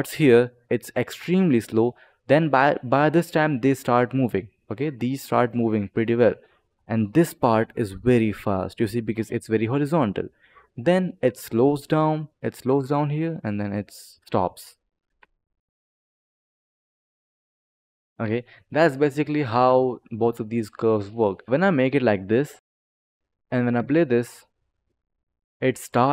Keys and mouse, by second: 10.6 click, 13.3 click, 14.4 2, 15.0 space, 17.8 click, 18.8 click, 19.6 click, 20.1 click, 21.4 click, 22.6 click, 23.2 click, 23.7 space, 25.6 click.